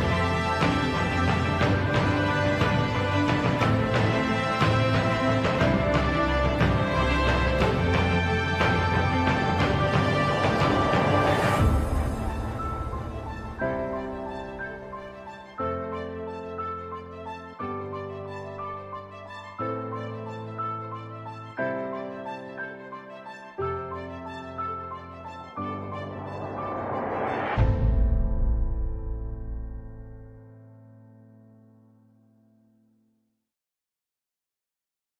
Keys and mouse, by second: 0.7 z, 1.7 shift+click, 2.8 g, 5.7 s, 8.2 s, 10.3 g, 13.2 s, 19.5 shift+middle click, 20.6 shift+middle click, 22.2 s, 26.0 s, 29.7 middle click, 32.5 z, 33.3 click, 34.6 middle click.